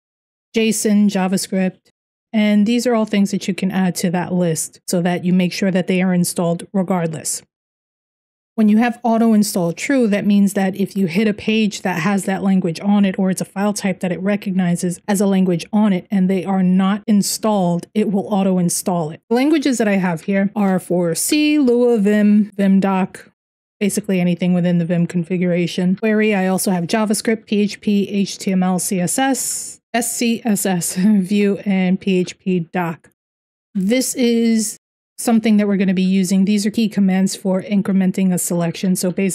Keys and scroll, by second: 19.6 Down, 20.3 Down, 20.9 Up, 23.3 Down, 23.4 Down, 23.5 Down, 25.5 Down, 28.5 Down, 28.7 Down, 29.0 Down, 29.6 Down, 31.3 Down, 31.8 Down, 32.8 Down, 33.3 Down, 33.5 Up, 34.8 Down, 35.4 Down, 35.6 Down, 38.4 Down, 39.0 Right.